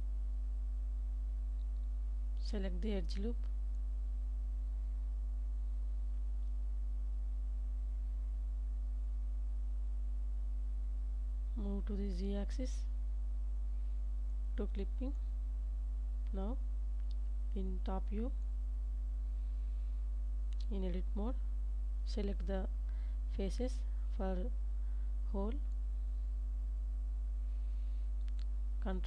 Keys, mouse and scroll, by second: 1.0 Tab, 1.9 alt+z, 3.2 Tab, 3.9 Tab, 4.8-6.0 middle drag, 8.3 Tab, 9.9 2, 10.6 alt+click, 11.3 g, 11.6 z, 13.6 click, 14.4 middle click, 15.7 Tab, 16.1 middle click, 17.0 ctrl+s, 17.9 KP_7, 18.8 shift+middle click, 19.4 Tab, 20.3 shift+middle click, 21.6 3, 24.6-25.9 drag.